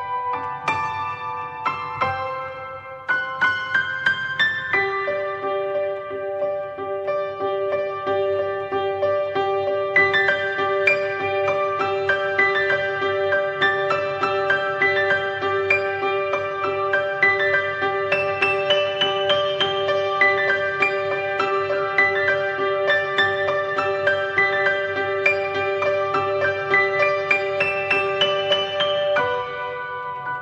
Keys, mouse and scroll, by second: 4.3 drag, 5.7 click, 7.1 click, 13.4 click, 18.2 drag, 20.1 drag, 21.1-22.0 middle drag, 22.0 drag, 23.9 drag, 27.0 click.